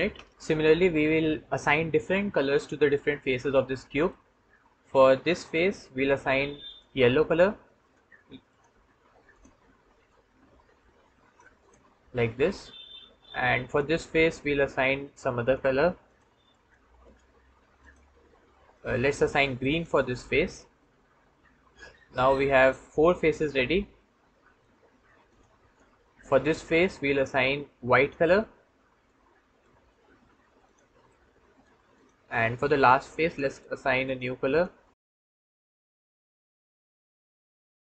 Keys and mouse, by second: 3.9 middle click, 5.3 click, 6.5 click, 7.7-11.1 drag, 12.4 click, 13.5-15.3 drag, 20.7-24.5 middle drag, 25.1 middle click, 26.9 middle click, 27.8 middle click, 28.9 middle click, 30.5 click, 30.9 middle click, 31.8 click, 33.1-34.0 drag, 34.3 click, 34.7 click, 35.1-38.0 drag.